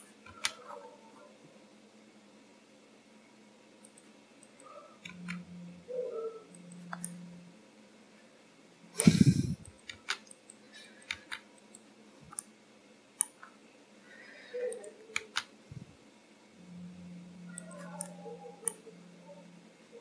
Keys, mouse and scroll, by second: 0.3 g, 4.6 click, 5.2 g, 7.3 middle click, 9.7 click, 10.1 g, 10.9 click, 11.2 g, 12.4 middle click, 13.5-14.0 scroll up 4, 14.8 click, 15.2 g, 18.1 middle click.